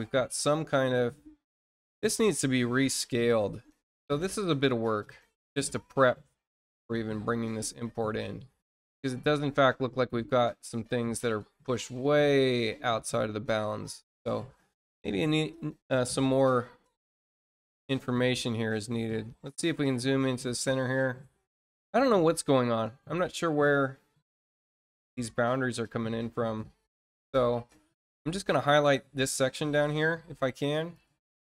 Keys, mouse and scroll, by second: 0.5 scroll up 2, 3.6-7.0 scroll down 15, 7.3-8.0 scroll down 2, 8.3-8.6 scroll down 1, 9.2 middle click, 10.1-11.7 scroll down 5, 11.9 middle click, 12.7 scroll down 2, 14.3 scroll up 2, 15.4-15.8 scroll up 2, 16.0-20.2 scroll up 12, 20.9-24.2 scroll down 16, 24.3 middle click, 25.0-26.0 scroll down 6, 26.2 middle click, 26.6 scroll down 2, 26.7 middle click, 28.0 click, 29.3-30.6 drag, 30.9 click.